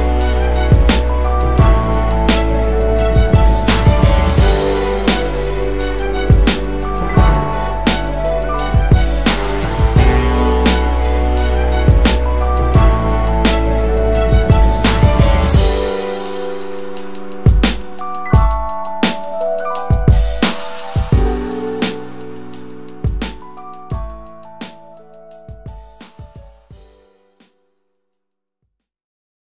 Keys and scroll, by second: 5.5 ctrl+alt+w.